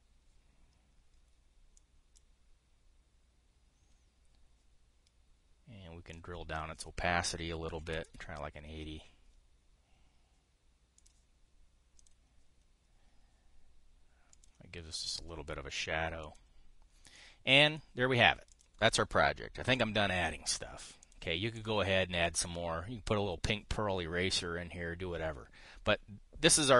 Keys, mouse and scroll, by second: 8.4 KP_8, 8.5 KP_0, 16.2-17.4 drag, 18.6 click, 20.3 KP_5, 22.3 click.